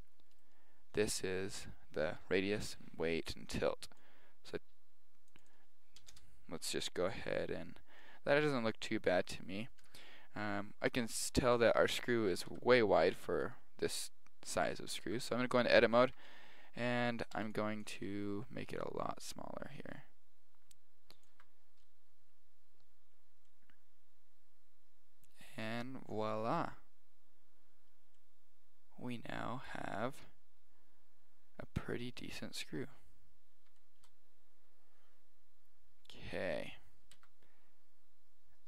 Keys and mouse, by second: 0.3 right click, 4.0-7.5 drag, 8.0-13.0 middle drag, 9.8 KP_1, 12.5 Tab, 13.2 right click, 15.1 Tab, 16.0 a, 17.3 b, 18.0 g, 21.3 Tab, 21.8-25.4 middle drag, 28.1-30.1 middle drag, 30.2 KP_1, 31.3-33.2 middle drag, 32.1 KP_3, 32.7 KP_1, 33.8-37.4 middle drag, 37.1 Tab.